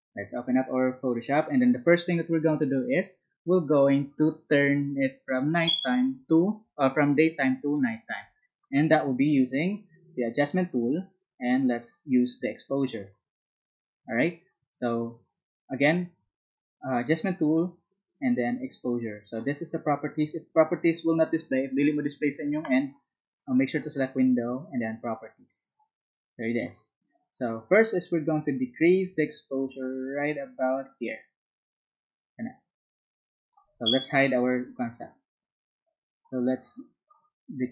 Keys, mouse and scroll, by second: 27.6 Right, 33.0-37.7 drag.